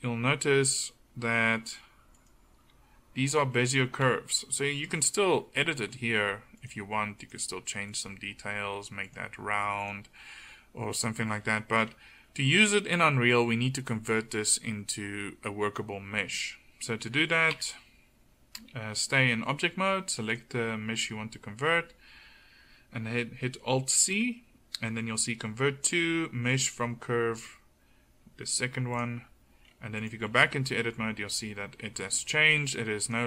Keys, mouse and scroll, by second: 2.2 middle click, 2.6 g, 4.1 KP_1, 4.7 g, 6.7 g, 8.1 g, 9.9 g, 11.4 middle click, 17.6 Tab, 24.0 alt+c, 29.6 middle click, 30.3 Tab.